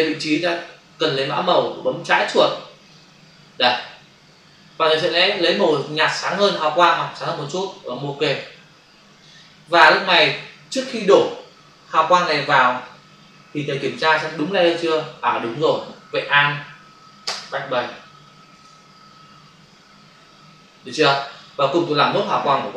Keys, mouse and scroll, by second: 2.8 click, 6.1 click, 8.2 click, 17.2 alt+BackSpace, 18.5 ctrl+d.